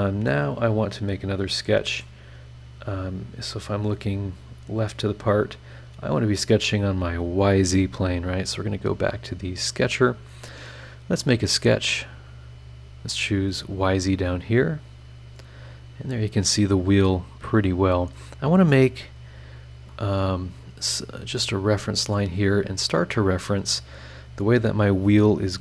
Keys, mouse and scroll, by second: 0.3-2.2 middle drag, 0.3-2.2 drag, 2.7 click, 3.5 scroll down 2, 3.9 scroll up 2, 8.9 click, 9.9 click, 12.1 click, 13.6 click, 14.5 click, 15.1-15.8 scroll down 4, 16.1 scroll up 2, 17.9 click, 19.2 click, 19.9 click, 21.1 click, 21.7 click, 24.0 click.